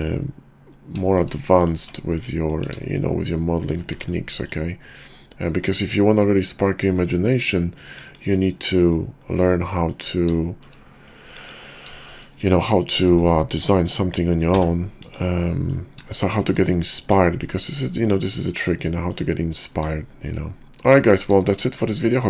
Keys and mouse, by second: 1.0 shift+drag, 1.6 click, 1.9 Tab, 2.2 click, 2.6 ctrl+b, 3.9 Tab, 6.7-7.8 middle drag, 8.0 KP_5, 9.3 middle click, 10.4 shift+click, 10.9 click, 11.3 KP_5, 11.9 shift+middle click, 14.5 t, 14.9 KP_5, 15.5-15.8 middle drag, 16.2-16.5 shift+middle drag, 16.7 middle drag, 17.3 shift+middle drag, 18.0-18.6 middle drag, 18.9 shift+middle drag, 19.5 middle click, 20.0-20.3 shift+middle drag, 20.4-21.0 middle drag, 21.1 shift+middle drag, 21.8-22.2 shift+middle drag.